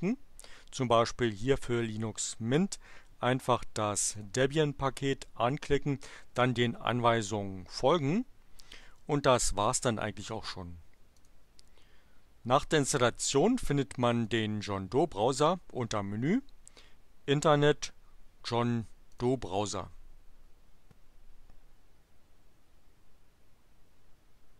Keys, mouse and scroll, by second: 4.1 click, 11.1 click, 14.3 click, 19.2 click.